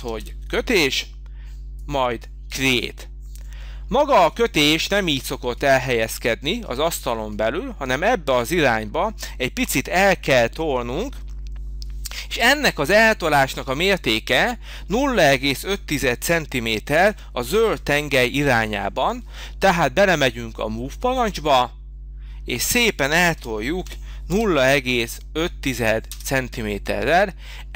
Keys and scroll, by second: 17.0 m, 23.3 0, 24.7 5, 26.0 Return.